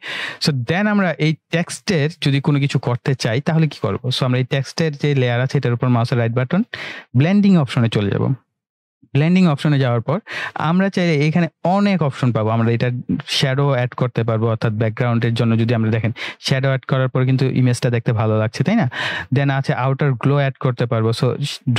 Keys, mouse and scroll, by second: 5.6 right click, 7.6-10.9 drag, 16.0-19.2 drag.